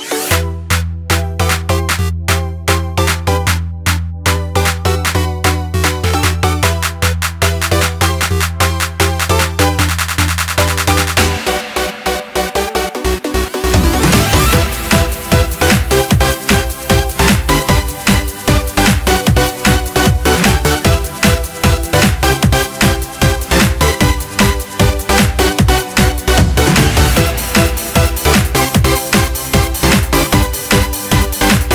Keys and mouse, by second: 1.5 click, 2.6 click, 4.3 click, 6.6 middle click, 11.9 click, 15.1 click, 25.4 click, 29.0 click.